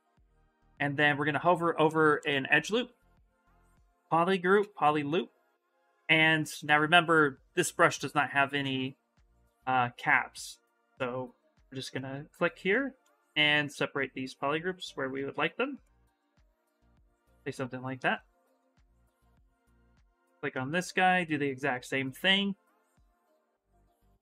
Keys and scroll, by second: 2.6 space, 19.4 ctrl+z.